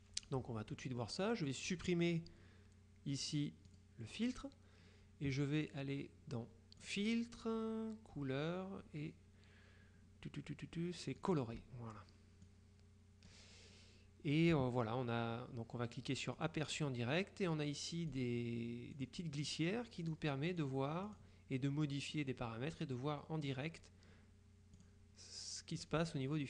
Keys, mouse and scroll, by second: 3.8 click, 6.9 click, 11.3 click, 12.5-13.9 drag, 16.5 click, 18.2 click, 19.0 click, 20.1-21.2 drag, 24.9 click, 25.9 click.